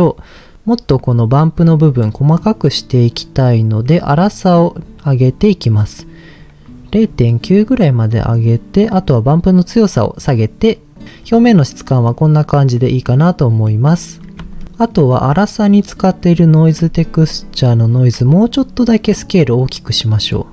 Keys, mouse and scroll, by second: 1.9 middle click, 4.1-6.3 drag, 7.1-8.2 scroll up 2, 8.2 middle click, 8.2 scroll up 1, 9.1-10.3 drag, 11.5-12.1 middle drag, 12.8 middle click, 13.7 middle click, 14.5 ctrl+shift+click, 14.9-16.0 middle drag, 17.0 ctrl+shift+click, 17.6 ctrl+shift+click, 19.1-20.5 drag.